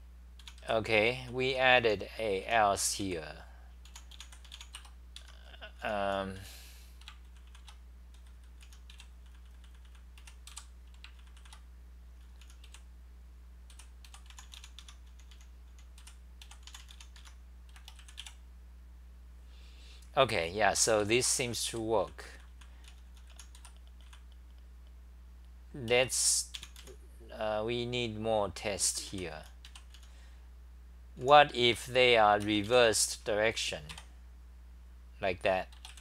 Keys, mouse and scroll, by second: 0.0-3.0 typing, 5.2 Return, 5.2 Home, 5.2-6.9 typing, 7.5 ctrl+c, 8.4-17.3 typing, 11.4 ctrl+c, 14.8 Home, 21.0-24.6 typing, 28.6-31.8 typing, 33.9 5.